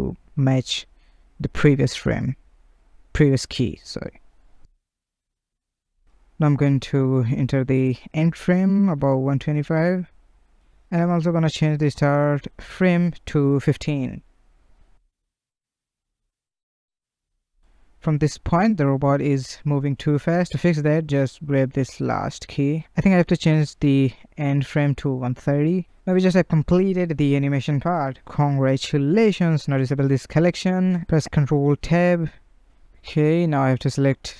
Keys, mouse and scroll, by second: 0.2 click, 1.9-2.7 drag, 2.7 space, 6.4 space, 6.8-13.4 drag, 13.5 shift+Left, 13.9 space, 18.6 space, 20.0 click, 21.4 click, 21.6 space, 23.7 space, 24.9-28.1 drag, 29.9 click, 31.1 ctrl+Tab, 31.8 click, 33.2-33.6 middle drag, 33.6-34.1 scroll up 3, 34.2-34.3 middle drag.